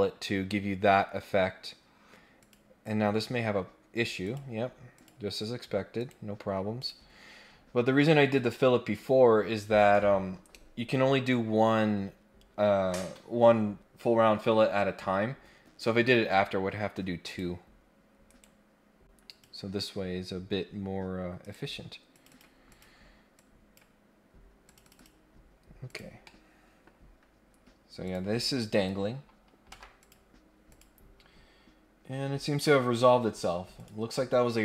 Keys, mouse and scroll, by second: 2.4 click, 2.8 click, 4.2 click, 4.9 click, 6.0 right click, 6.8 click, 7.2 scroll down 1, 7.6 scroll up 1, 17.2 click, 18.3 right click, 19.2 click, 21.4 right click, 22.1 click, 22.3 click, 22.6 click, 23.3 click, 24.6 click, 24.8 click, 25.8 click, 26.2 middle click, 28.0 click, 29.7 Delete, 29.9 click, 30.7 click, 33.7 click.